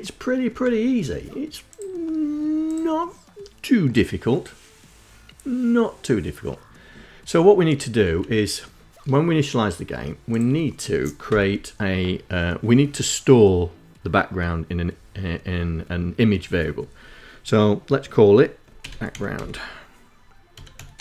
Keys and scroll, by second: 7.8 Up, 11.0 Return, 18.3-21.0 typing.